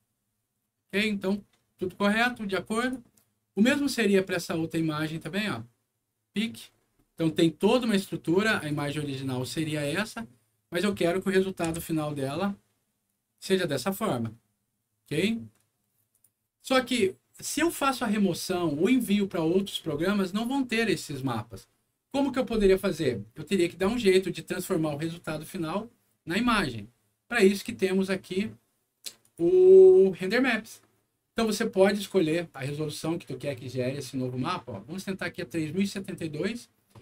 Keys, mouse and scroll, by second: 2.7 click, 3.5 click, 5.0 click, 6.5-7.3 scroll up 2, 7.3 middle click, 8.5 click, 8.7 click, 9.4 click, 11.1 middle click, 11.6 F9, 16.1 click, 18.8 click, 19.5 click, 20.6 middle click, 21.1 scroll down 1, 23.9 click, 29.2 click, 32.5 click, 35.8 click.